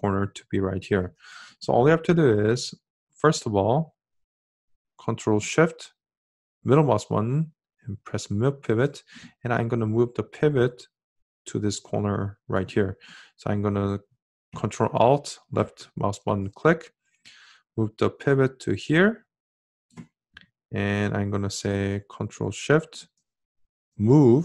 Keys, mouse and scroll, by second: 4.9-9.9 ctrl+shift+middle drag, 13.8-19.3 ctrl+alt+drag, 22.6-24.4 ctrl+shift+middle drag.